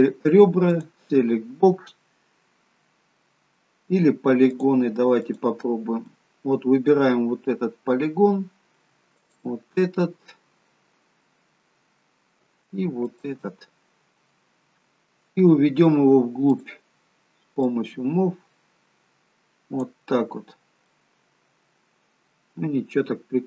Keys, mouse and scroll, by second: 0.8 click, 4.6 click, 5.3 click, 6.2 middle click, 9.8 shift+click, 9.9 middle click, 11.9-12.3 scroll down 1, 13.2 shift+click, 13.8-15.2 scroll down 2, 14.2 middle click, 16.6 click, 17.8 click, 20.4 scroll up 3, 21.0 middle click.